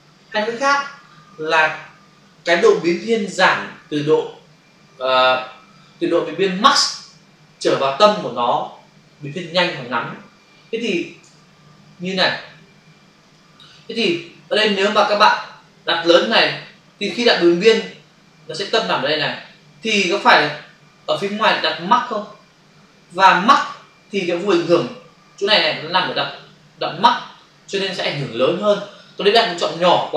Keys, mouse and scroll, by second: 11.2 f, 13.2 click.